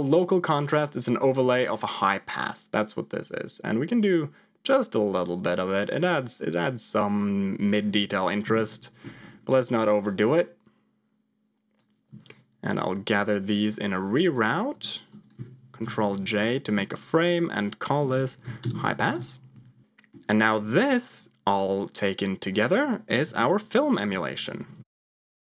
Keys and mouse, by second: 1.1 middle click, 1.7-7.2 drag, 7.7 click, 9.4 middle click, 9.9-11.7 drag, 12.2 shift+click, 13.4-14.4 drag, 14.6 g, 15.8 ctrl+j, 16.6 F2, 18.9 s, 19.8 middle click, 20.6 middle click, 21.1 click, 21.4-22.5 drag, 23.5 ctrl+j, 24.0 F2.